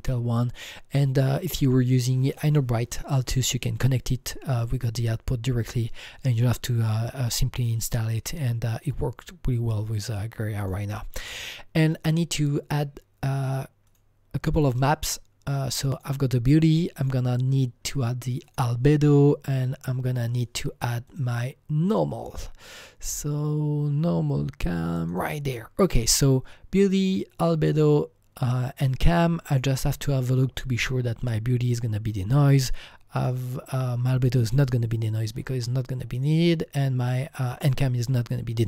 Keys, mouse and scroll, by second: 10.5 click, 10.6 click, 10.8 click, 11.8 click, 13.8 click, 16.0 click, 17.0 click, 18.9 click, 20.4 click, 21.1 click, 21.2 click, 21.9 click, 25.1 click, 29.5 click, 29.6 click, 33.2 click, 36.2 click, 36.3 click.